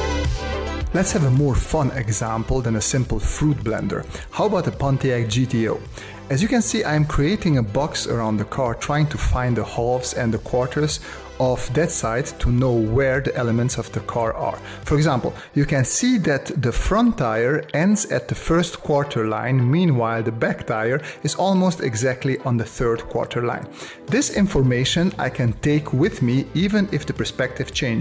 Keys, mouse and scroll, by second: 1.2 ctrl+alt+KP_0.